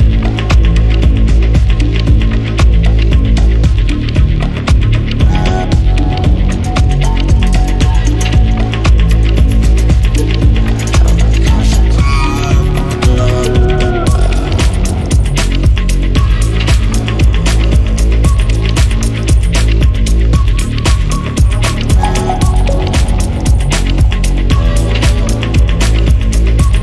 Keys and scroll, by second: 3.0 ctrl+shift+i, 10.6 Escape, 13.4 3, 13.5 Return, 16.2 Escape.